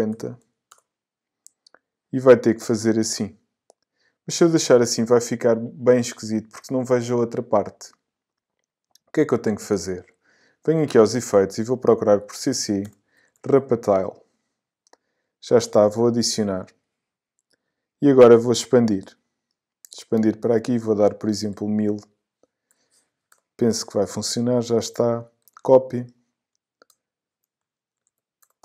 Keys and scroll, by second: 0.4 0, 0.7 Return, 12.2 c, 21.1 i, 22.7 0, 23.3 Return, 25.5 super+c, 28.0 super+v, 28.4 super+Return.